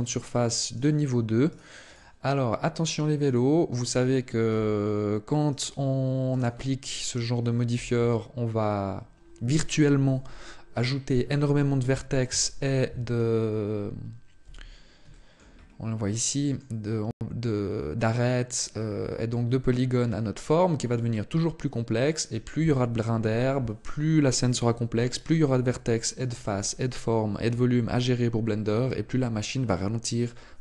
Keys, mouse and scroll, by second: 0.5 right click, 1.3 right click, 1.7 right click, 3.1 click, 5.3 right click, 6.1 right click, 7.8 Tab, 14.2 z, 14.9 shift+middle click, 15.3-15.9 scroll up 4, 15.9 middle click.